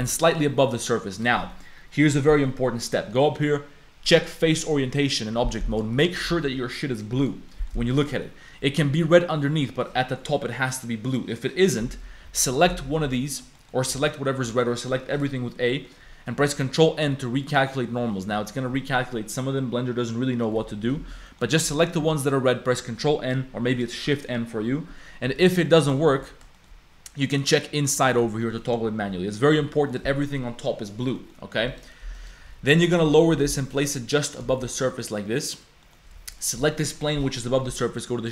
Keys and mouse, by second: 1.1 click, 1.5 click, 2.3 click, 3.3-5.3 drag, 5.4 click, 5.7 click, 5.9 click, 6.3 g, 7.5 click, 7.9 shift+click, 8.2 click, 8.9 click, 9.5 click, 10.5 click, 11.3 click, 11.8 Tab, 12.2-13.9 typing, 13.6 click, 14.7 click, 15.8 click, 16.4 ctrl+n, 17.7 click, 21.3 ctrl+z, 21.3 click, 21.7 click, 22.0 a, 25.3 3, 25.4 click, 26.1 ctrl+n, 26.5 shift+click, 27.4 click, 27.8 click, 28.5 click, 29.3 click, 29.6 Tab, 29.8 click, 30.1 click, 31.2 click, 32.2 click, 32.5 z, 33.0 z, 33.1 click, 34.4 g, 34.5 shift+click, 34.7 click, 35.1 click, 35.8 click, 36.2 g, 36.7 click.